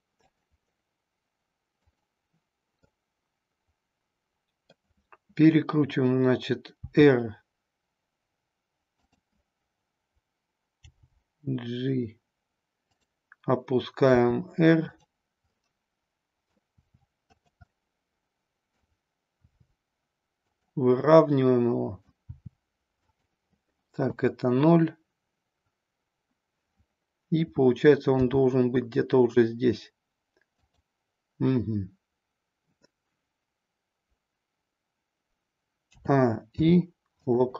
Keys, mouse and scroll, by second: 0.2 click, 2.0 click, 2.7-4.7 middle drag, 6.8 r, 10.8 g, 13.0 click, 14.1 r, 15.0 click, 15.4-16.6 middle drag, 16.8 r, 17.6-18.7 middle drag, 19.5 r, 20.6 click, 20.9-22.1 middle drag, 22.3 r, 23.1 click, 24.1 KP_0, 28.2 g, 30.6 click, 35.9 a, 36.5 i.